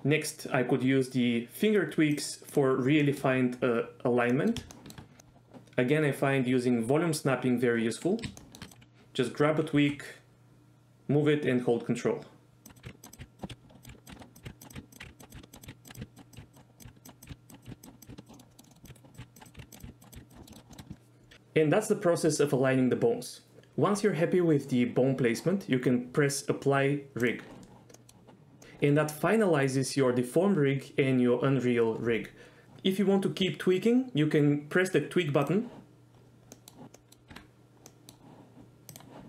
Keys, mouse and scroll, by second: 2.1 click, 2.5 click, 3.0 middle drag, 4.4 middle click, 4.7 shift+middle drag, 8.4 shift+middle click, 8.7 click, 9.8 g, 12.8-20.1 typing, 13.0 ctrl+click, 13.4 ctrl+click, 14.0 ctrl+click, 14.1 shift+middle click, 14.4 click, 14.7 click, 14.9 ctrl+click, 15.3 click, 15.6 click, 15.9 click, 16.5 ctrl+click, 17.6 click, 17.8 ctrl+click, 18.0 click, 18.2 ctrl+click, 18.3 middle click, 18.5 middle drag, 18.6 middle drag, 19.0 right drag, 19.3 ctrl+drag, 19.4 click, 20.3 ctrl+click, 20.4 middle click, 20.7 shift+middle click, 20.9 shift+middle click, 27.9 middle click, 35.4 click, 36.6 middle click, 36.9 middle click, 37.3 Tab, 37.9 middle click, 38.9 click.